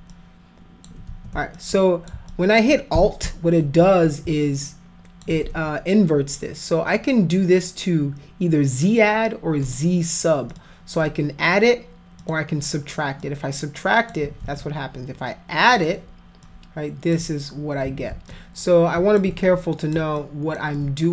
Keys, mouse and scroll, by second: 0.1 click, 1.1 ctrl+z, 1.6 alt+click, 2.3 alt+click, 4.5 alt+click, 9.7 click, 10.5 click, 11.0 click, 11.5 click, 12.2 click, 13.2 click, 14.4 ctrl+z, 15.8 click, 16.5 click, 17.9 ctrl+z, 18.3 click, 19.5 alt+click, 20.2 alt+click, 20.8 alt+click.